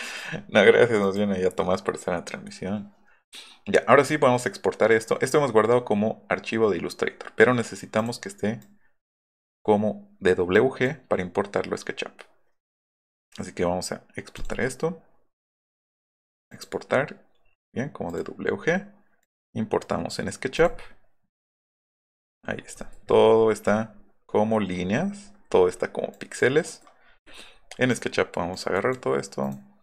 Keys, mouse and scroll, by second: 1.0 click, 8.0 click, 8.6 click, 10.5 click, 14.3 click, 16.5 click, 18.1 click, 19.2 click, 20.5 click, 21.7 click, 22.1 scroll down 1, 22.5 middle click, 22.7 scroll down 1, 24.7 middle click, 24.9 middle click, 25.5 middle click, 25.7 middle drag, 26.1 click, 26.8 middle click, 27.3 click, 27.4 middle click, 27.9 click, 28.5 click, 28.8 drag.